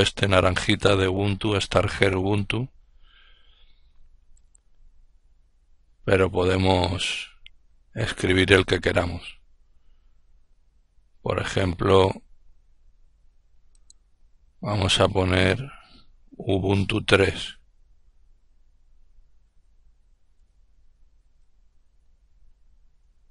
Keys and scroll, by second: 18.9-21.3 typing, 22.3 typing.